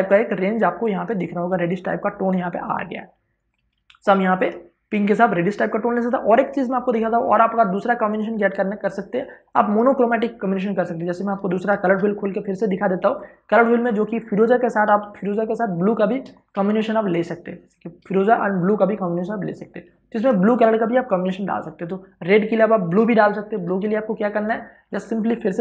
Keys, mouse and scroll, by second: 3.5 v, 4.1 click, 11.6 ctrl+o, 12.9 click, 14.8 space, 14.9 ctrl+click, 16.3 ctrl+space, 16.5 ctrl+click, 16.8 ctrl+space, 19.9 click, 23.5 space, 23.7 ctrl+click, 24.6 v, 25.0 click.